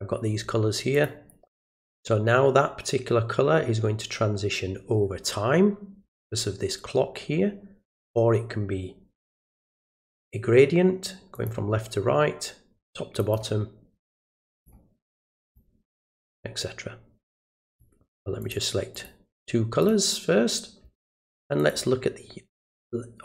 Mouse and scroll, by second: 0.9 click, 8.0 click, 11.3 click, 13.2 click, 14.5 click, 15.4 click, 17.7 click, 18.4 click, 18.9 click, 19.8 click, 21.6 click.